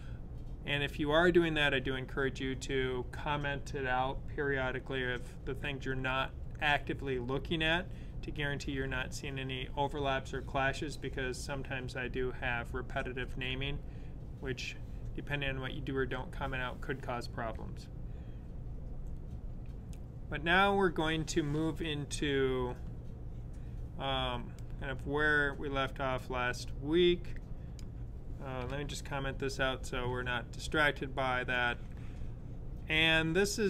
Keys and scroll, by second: 28.5 super+/.